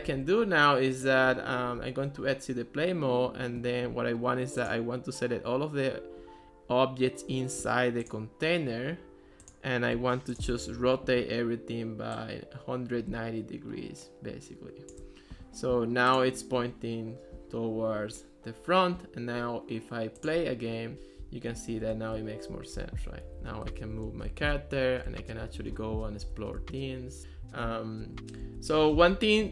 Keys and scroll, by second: 0.0 d, 20.7-29.5 typing.